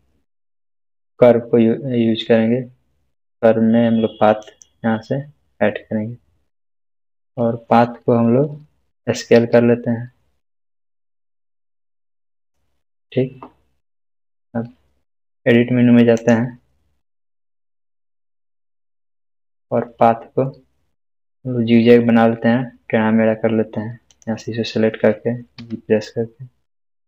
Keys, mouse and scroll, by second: 4.4 shift+a, 4.7 click, 9.3 click, 9.4 s, 12.4 s, 12.4 click, 16.2 click, 24.1 click, 25.6 g.